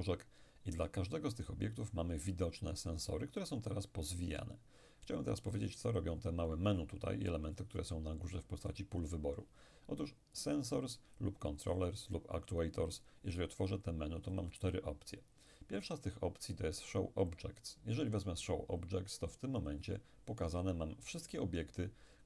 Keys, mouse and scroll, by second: 10.4 click, 11.7 click, 14.4 click, 19.7 click.